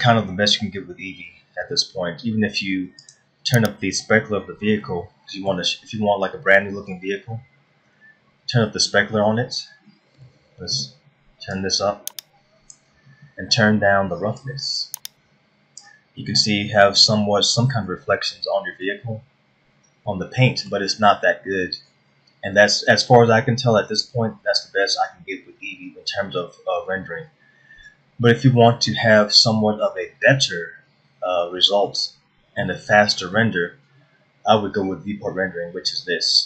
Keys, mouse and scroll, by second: 0.2 shift+middle click, 3.6 click, 5.4 middle click, 7.0-7.3 scroll up 2, 8.3 scroll up 2, 10.9 shift+middle click, 12.1 click, 15.0 click, 16.8-17.2 scroll down 2, 17.3 middle click, 18.9 middle click, 20.0-20.5 scroll up 2, 20.6 middle click, 27.1-27.5 scroll down 1, 32.5 middle click.